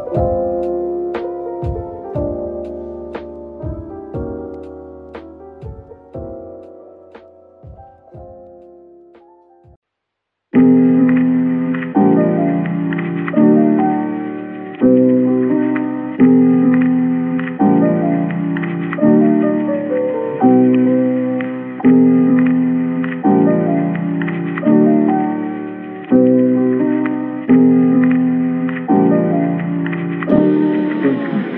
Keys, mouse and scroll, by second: 0.6-1.2 typing, 6.9 double click, 8.8 shift+click, 11.6-12.2 scroll up 1, 21.9 typing, 23.4 double click, 25.2 typing, 26.2-26.6 scroll, 26.6 scroll down 1, 27.1 scroll down 1, 27.7 middle click, 27.8-28.1 scroll down 1, 28.8-29.2 scroll down 2, 28.9 middle click.